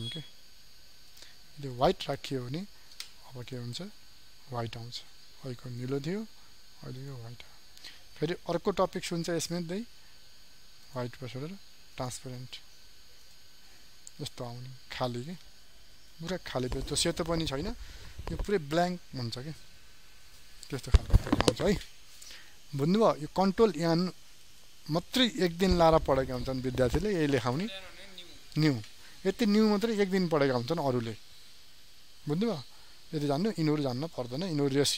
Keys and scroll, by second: 8.6 ctrl+n.